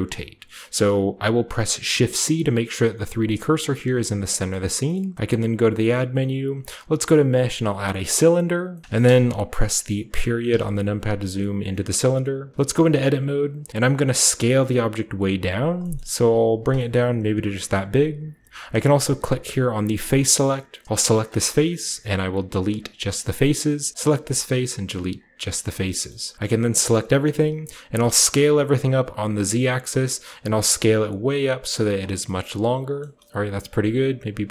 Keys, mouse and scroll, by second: 1.1 click, 1.8 shift+c, 2.6 drag, 3.8 shift+c, 4.4-7.2 scroll up 1, 4.9-7.2 shift+middle drag, 4.9 typing, 7.9 click, 8.7-10.4 shift+middle drag, 8.8-10.4 shift+scroll up 1, 11.0 scroll down 2, 11.8-12.6 middle drag, 12.5 Tab, 13.4 scroll down 2, 14.1 s, 15.5-17.6 drag, 15.8-17.7 scroll up 1, 16.1 s, 18.2-20.0 scroll up 1, 20.0 click, 20.0-20.8 scroll up 1, 21.0 middle click, 21.4-22.8 scroll up 1, 21.7 typing, 23.0 click, 24.1 typing, 24.9-26.0 drag, 26.8 a, 27.0 scroll down 1, 27.8 s, 28.3 z, 29.6-31.4 drag, 29.9-31.3 scroll down 1, 30.3-31.3 typing, 32.0-32.9 scroll down 1, 32.9-34.5 scroll up 1, 32.9-34.5 middle drag, 33.6 typing.